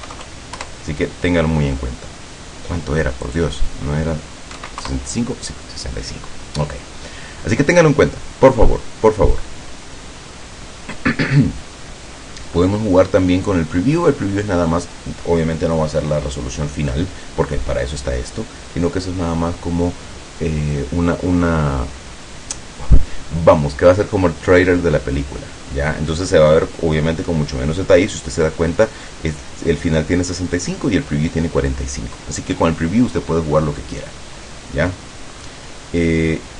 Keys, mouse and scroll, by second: 0.0 KP_6, 0.6 KP_Enter, 3.4 click, 4.6 KP_6, 4.9 KP_Enter, 10.6 scroll down 2, 35.4-35.8 scroll down 2.